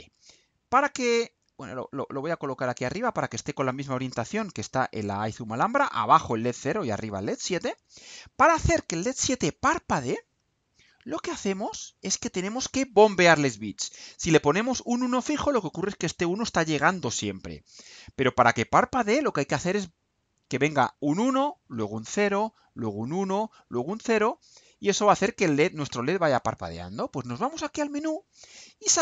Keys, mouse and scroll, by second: 1.1-1.8 drag, 2.0 click, 3.4 right click, 4.2-5.5 drag, 5.6-7.0 drag, 7.5 click, 9.6 click, 11.8 Delete.